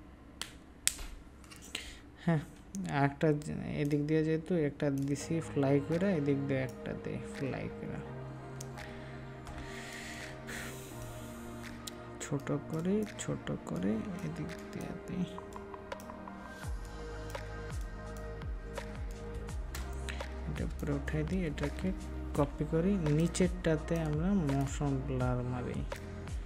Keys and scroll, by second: 9.5 ctrl+space, 22.3 ctrl+j.